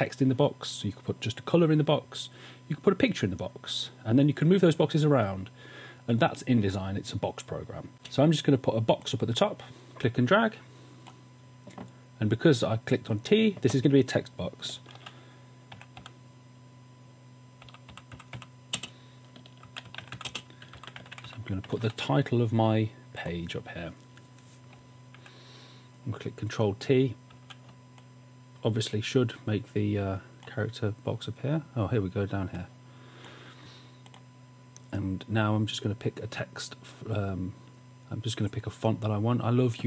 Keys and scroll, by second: 7.9 space, 15.1-16.5 typing, 17.6-24.0 typing, 25.3 super+t, 27.5 super+t.